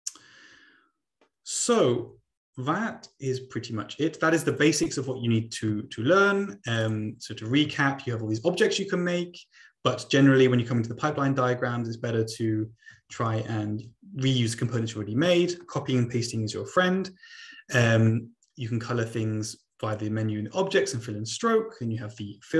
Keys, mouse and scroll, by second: 5.1-5.6 scroll down 2, 5.6-6.8 scroll down 1, 6.8 click, 11.3 middle click, 12.1-13.0 ctrl+scroll down 1, 13.0 ctrl+z, 13.3 ctrl+z, 13.4 ctrl+z, 15.1 ctrl+z, 19.9 click.